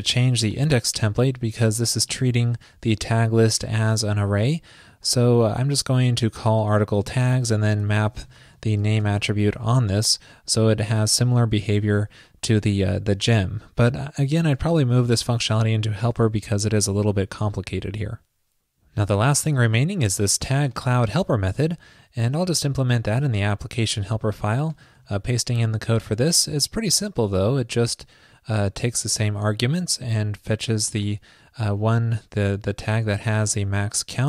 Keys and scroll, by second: 16.9 super+s, 25.1 super+v.